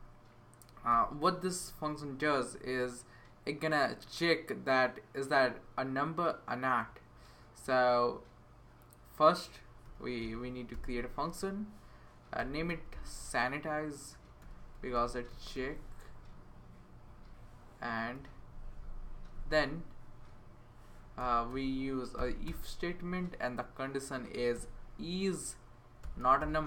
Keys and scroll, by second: 0.9 i, 1.7 BackSpace, 9.8-10.7 typing, 12.1-16.0 typing, 16.9 Right, 18.1 x, 18.3 Tab, 18.6 Right, 18.9 Right, 19.3 Right, 20.9-22.0 typing, 22.4 Return, 24.1-26.6 typing.